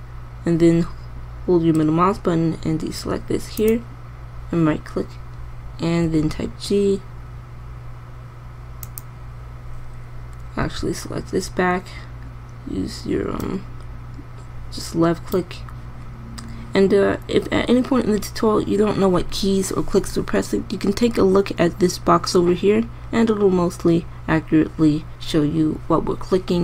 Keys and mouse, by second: 4.2-5.9 drag, 6.6 g, 11.1 c, 17.7 click.